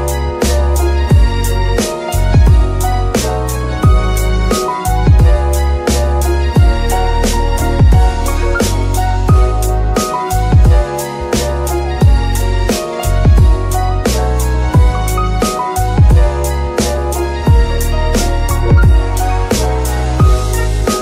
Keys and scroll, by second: 5.3 g, 5.5 x, 12.8 F2, 13.6 BackSpace, 13.8 BackSpace, 13.9 BackSpace, 14.7 BackSpace, 15.6 Left, 15.7 Left, 15.8 Left, 16.4-18.1 typing, 18.4 Return.